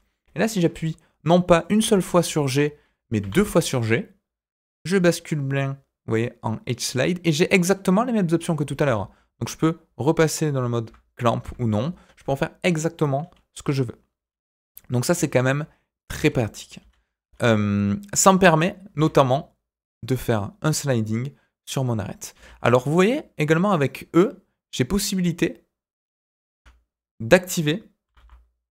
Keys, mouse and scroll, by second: 0.5-1.2 scroll up 2, 1.2 middle click, 1.8 g, 28.0 g.